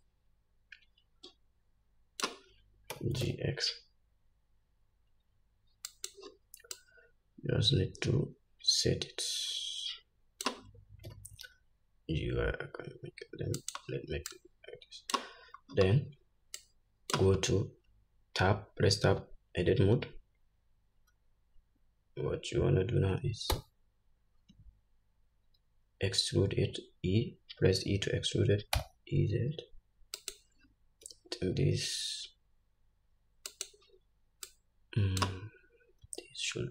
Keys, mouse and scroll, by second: 0.2-6.4 drag, 3.3 g, 7.1-14.1 drag, 11.5 g, 14.7-30.7 drag, 16.1-16.8 scroll up 2, 17.8 scroll up 1, 19.2 Tab, 34.9-36.7 drag, 36.4 s.